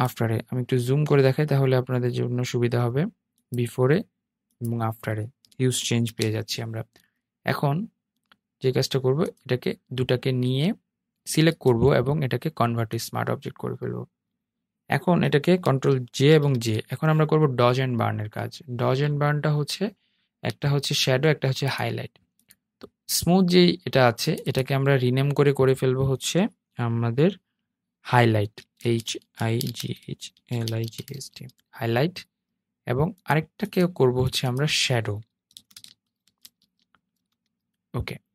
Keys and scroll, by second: 5.1 super+0, 15.3 super+j, 15.6 super+j.